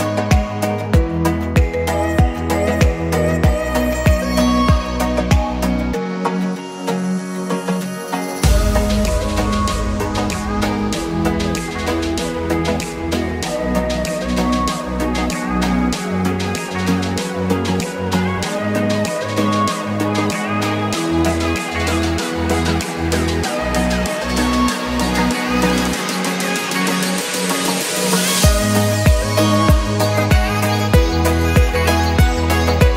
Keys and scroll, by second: 27.2 a, 27.6 w, 28.0 a, 28.3 w, 29.5 w, 30.3 d, 31.3 s, 32.1 d.